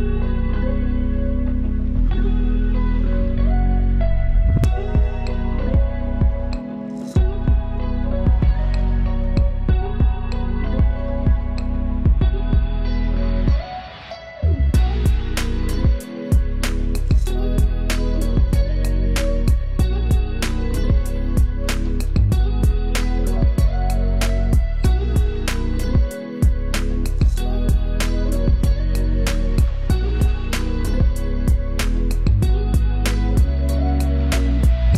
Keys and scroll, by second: 12.1 super+c.